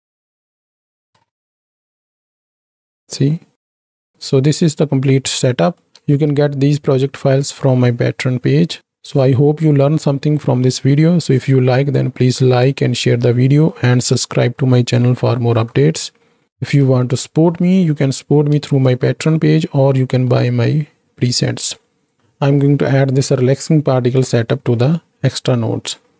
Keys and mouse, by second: 1.2 space, 1.4 drag, 1.9-2.8 drag, 3.4-3.9 middle drag, 4.0 ctrl+space, 4.1-5.9 drag, 6.2 ctrl+space, 7.2-8.8 drag, 13.7-14.7 drag, 15.5 KP_7, 17.0 shift+click, 18.7 ctrl+space, 20.4 shift+click.